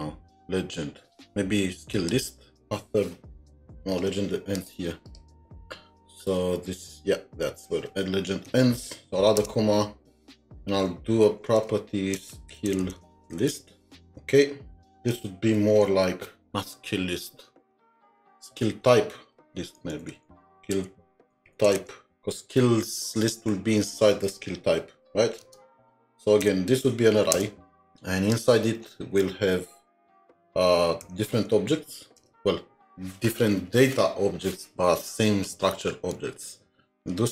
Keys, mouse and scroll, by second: 5.1 double click, 5.5-5.8 scroll down 1, 6.2-6.5 scroll up 2, 9.4 Return, 12.1-15.4 typing, 19.8 typing, 19.9 Left, 20.1 Left, 20.3 Left, 20.4 Left, 21.2-22.6 typing, 25.4-26.4 typing, 27.3 Return, 28.0 scroll down 2, 28.5-29.3 scroll up 1, 32.2 Return, 36.7 Return.